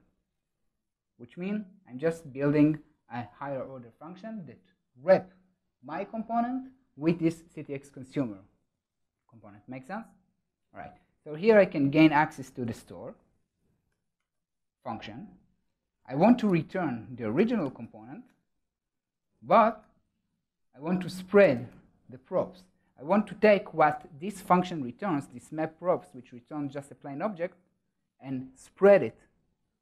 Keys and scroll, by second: 18.2 Return, 22.7 Escape, 26.0 ctrl+alt+shift+Right.